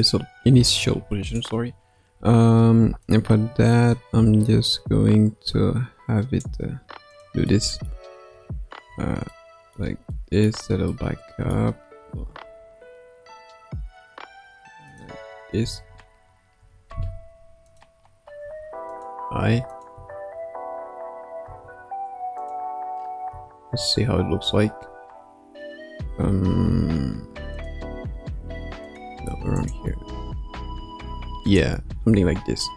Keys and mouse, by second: 0.6 ctrl+Tab, 1.3 click, 3.0-6.4 drag, 7.5-7.9 middle drag, 8.2 KP_3, 8.8 KP_1, 9.3-9.8 middle drag, 10.1-10.5 middle drag, 11.0 middle click, 12.4 r, 15.6 a, 16.5 i, 17.6 click, 18.4 g, 19.7 click, 20.0 space, 22.3 click, 22.3 space, 23.3 space, 26.6 space, 27.5 click, 28.2 g, 29.5 click, 29.9 space, 30.7 space, 31.5-31.9 drag, 31.9 space.